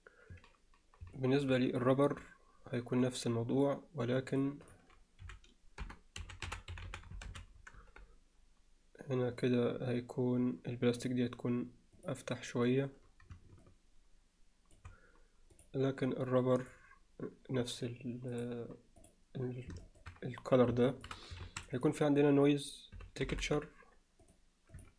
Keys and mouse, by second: 1.2 alt+middle drag, 1.8-3.7 drag, 4.3 drag, 4.8-8.1 drag, 6.9 b, 16.7 drag, 18.4-19.1 drag, 20.0 alt+shift+middle click, 21.0 shift+middle click, 21.4 shift+a.